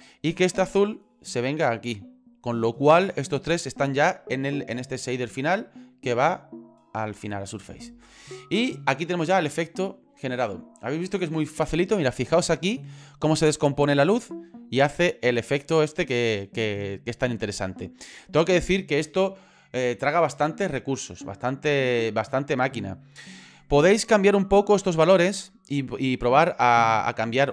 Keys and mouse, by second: 0.9-2.2 drag, 5.8 click, 17.0 middle click.